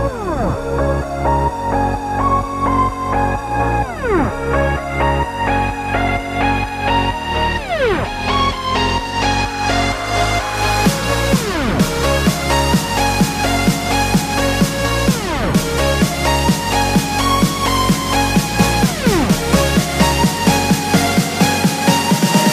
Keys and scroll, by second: 5.1 super+-, 5.3 super+-, 5.5 super+-, 5.7 super+-, 6.1 super+-, 7.7 super+=, 7.9 super+=, 11.0 super+-, 11.3 super+-, 11.8 super+-, 12.3 super+=, 12.6 super+=, 17.0 super+-, 17.9 super+=.